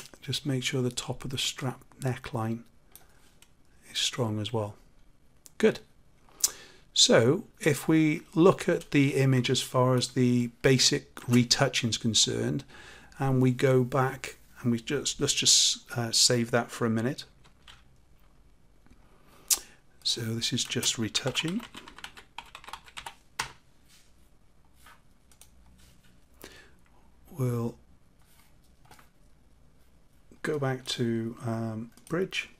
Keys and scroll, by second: 17.4 ctrl+shift+s.